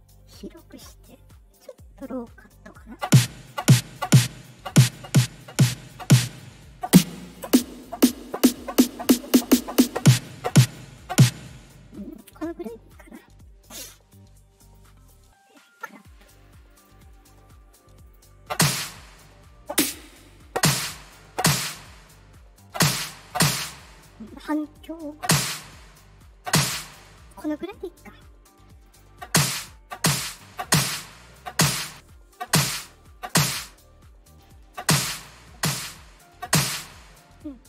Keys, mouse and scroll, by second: 1.2 click, 5.4 click, 11.9 click, 14.6 click, 16.6 click, 18.0 click, 28.8 click, 30.2 click, 31.8 click, 34.2 click.